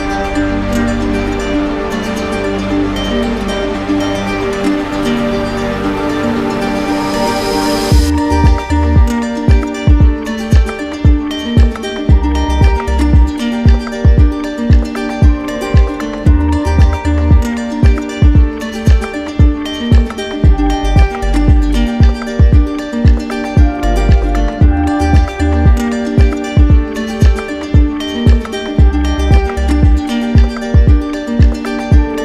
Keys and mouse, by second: 22.7-23.8 drag, 25.4-26.6 drag.